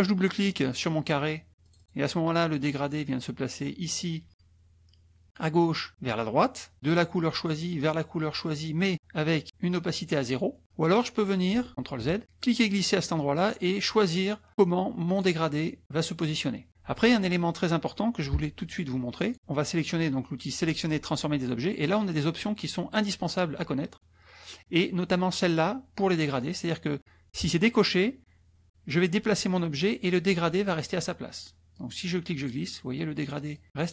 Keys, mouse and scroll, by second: 1.7 click, 6.9 click, 8.4 click, 11.7 ctrl+z, 12.5-14.0 drag, 14.5 click, 16.0-16.7 drag, 19.2-30.7 drag, 31.7-32.5 drag.